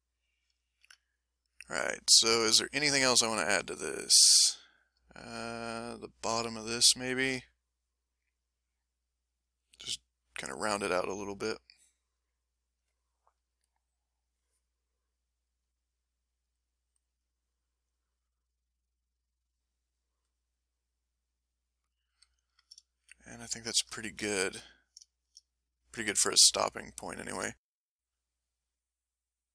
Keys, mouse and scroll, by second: 7.2 ctrl+s, 12.5 click, 13.9 click, 15.1-18.1 drag, 18.3 click, 19.7 click, 20.5-22.3 drag, 22.7 ctrl+click, 23.7-26.0 ctrl+shift+middle drag, 26.3 ctrl+shift+click, 27.1 ctrl+shift+middle click.